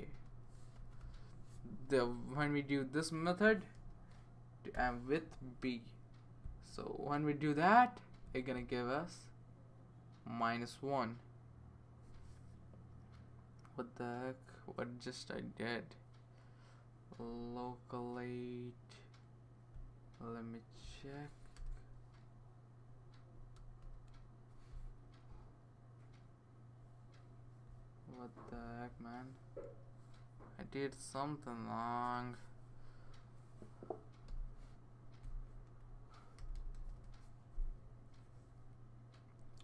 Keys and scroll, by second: 0.0-1.5 typing, 3.7 (, 4.7 b, 21.5 BackSpace, 23.8 l, 30.4 \, 34.3 i, 35.5 Left, 36.8 BackSpace, 36.9 BackSpace.